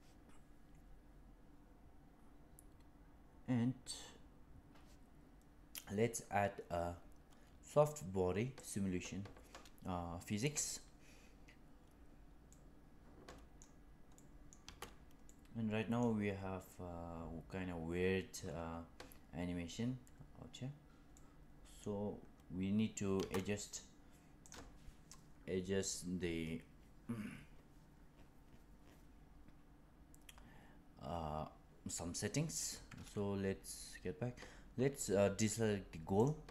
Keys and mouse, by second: 8.5 click, 12.4-13.5 middle drag, 14.0-14.4 middle drag, 14.5 space, 15.2 middle click, 21.0-21.7 middle drag, 23.1 space, 24.4 click, 36.1 click.